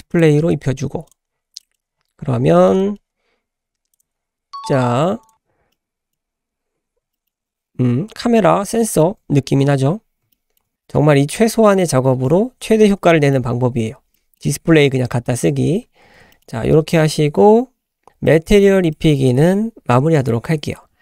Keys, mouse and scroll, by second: 0.1 click, 0.8 Tab, 0.8-1.1 scroll down 1, 1.1 click, 1.6 shift+middle click, 1.6-2.5 shift+scroll down 4, 2.5 shift+middle click, 2.8 middle click, 3.9 click, 4.2 scroll up 1, 4.6 click, 5.2 click, 5.5 scroll down 1, 5.7-6.2 middle drag, 6.2-6.9 scroll up 3, 6.9 scroll up 1, 7.1-8.5 shift+middle drag, 8.5 scroll down 1, 8.8 shift+middle click, 9.7-10.0 scroll up 2, 10.3-10.6 shift+middle drag, 13.1 shift+middle click, 13.8-14.1 scroll down 2, 14.1 middle click, 15.4 scroll down 1, 15.7 `, 16.0 scroll down 1, 16.3 shift+middle click, 16.5-18.5 scroll up 3, 18.5 shift+middle click, 18.8-19.3 middle drag, 19.8 shift+middle drag.